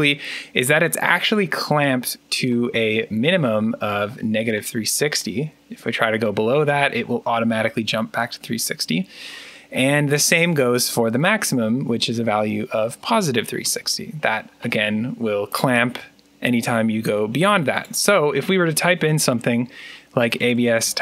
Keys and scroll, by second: 18.9-21.0 typing.